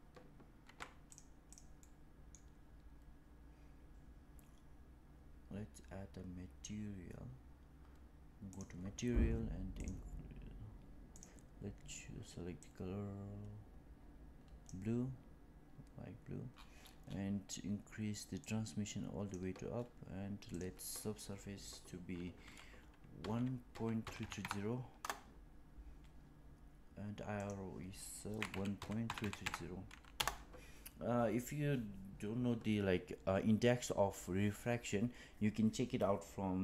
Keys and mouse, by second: 0.5 Tab, 1.7-2.2 middle drag, 11.0 click, 18.3 click, 20.5-26.0 drag, 24.1 KP_3, 27.4-36.6 drag, 29.1 KP_3.